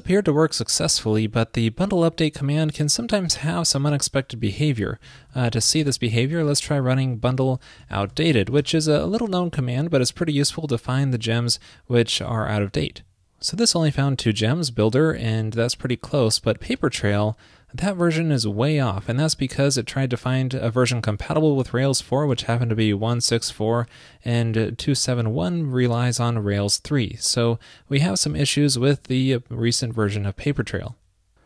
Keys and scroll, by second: 30.6 super+c.